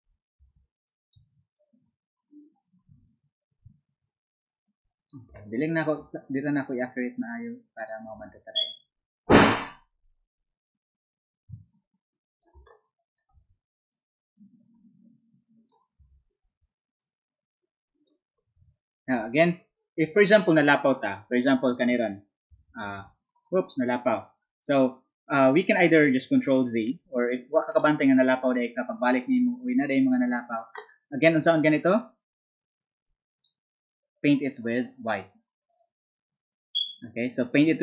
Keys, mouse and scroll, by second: 12.2 click, 12.2 z, 12.5 space, 14.2-24.4 drag, 19.9 z, 34.7-37.2 drag.